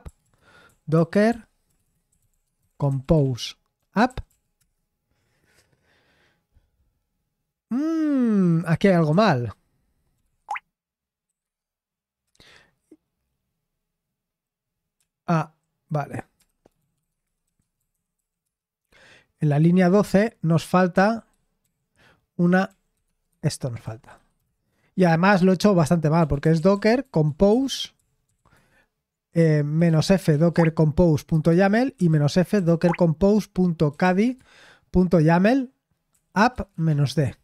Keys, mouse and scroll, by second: 0.0-4.5 typing, 8.5-12.2 typing, 16.1-21.6 typing, 22.6-24.6 typing, 23.2 Escape, 26.0-28.4 typing, 29.5-34.5 typing, 36.0-37.4 typing.